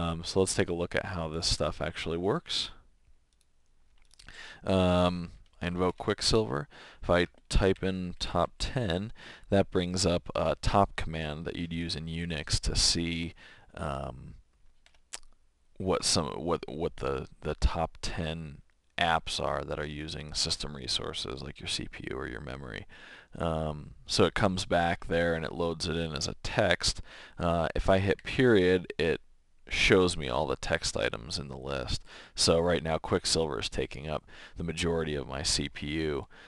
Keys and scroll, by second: 7.4-8.9 typing, 14.8 Return, 28.1 ..